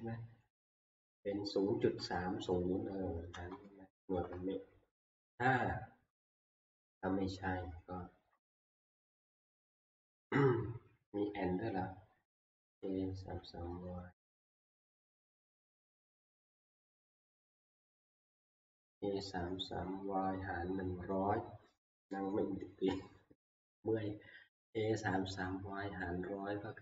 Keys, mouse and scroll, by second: 2.0-2.8 Right, 3.3 Right, 3.6 Right, 3.9 Right, 4.1 Right, 4.3-5.3 Right, 12.2 Right.